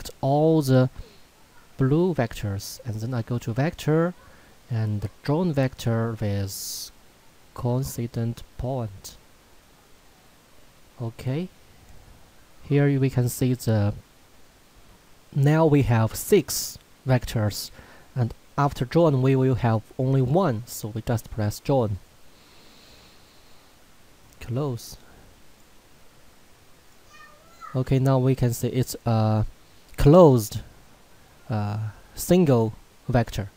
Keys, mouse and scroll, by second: 3.3 click, 7.8 click, 21.9 click.